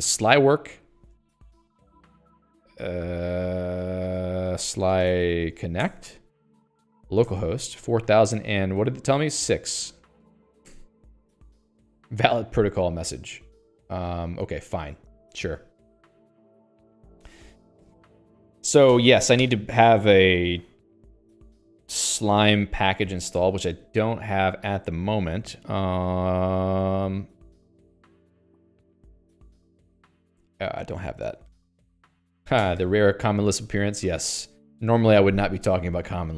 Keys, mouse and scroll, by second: 1.6 Return, 4.7-6.1 typing, 6.2 Return, 7.6 Return, 9.7 Return, 10.4 BackSpace, 10.6 6, 11.3 Return, 15.4 click, 15.8 q, 23.4 Escape, 28.6 click, 29.5-30.4 typing, 32.0 ctrl+g.